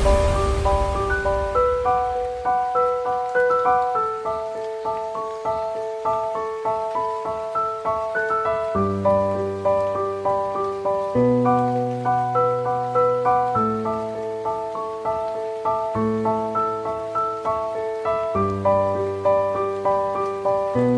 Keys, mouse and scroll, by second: 0.0-1.2 scroll up 1, 2.7 ctrl+s, 4.8 drag, 5.5 shift+a, 10.5-11.9 drag, 13.4 alt+a, 15.5 click, 18.5 alt+a.